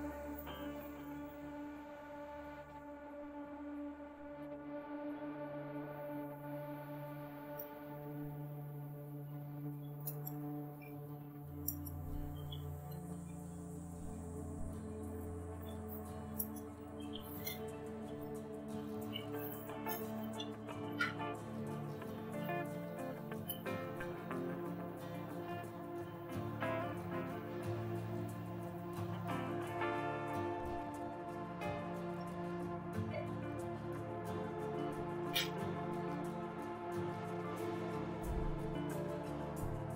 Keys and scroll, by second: 7.6 Return, 9.4-21.5 typing, 23.4 Return, 32.1 a, 34.8 Return.